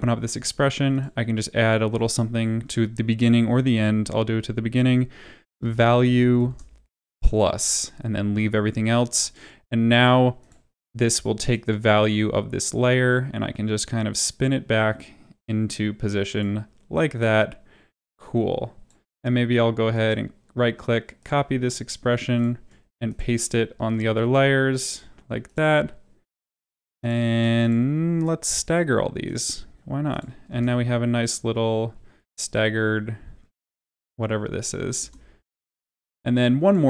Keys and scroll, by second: 3.3 Up, 23.7 ctrl+v, 30.4 space, 35.0 space.